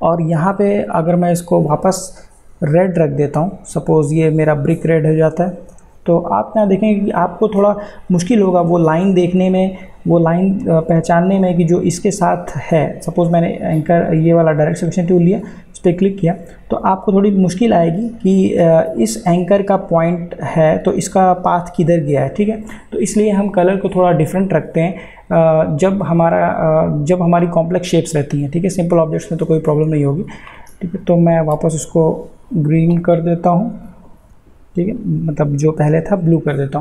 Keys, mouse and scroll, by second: 1.1-10.4 drag, 17.9-26.5 drag, 30.9 ctrl+z, 33.4 ctrl+z.